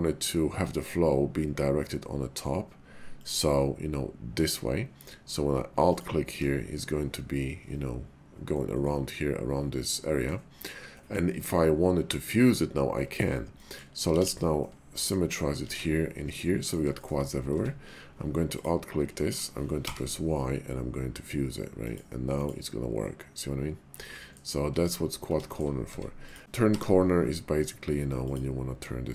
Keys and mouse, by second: 3.2 click, 5.7 alt+click, 8.5-10.3 middle drag, 10.9 middle click, 12.9 middle click, 13.6 middle click, 14.1 alt+x, 14.6 middle click, 15.7 alt+x, 16.3 middle click, 16.9 shift+click, 17.5 Tab, 18.4 alt+click, 19.7 y, 23.1-24.4 middle drag, 24.6 ctrl+z, 25.4 shift+middle click, 25.9 Tab, 26.2 click, 26.5 y.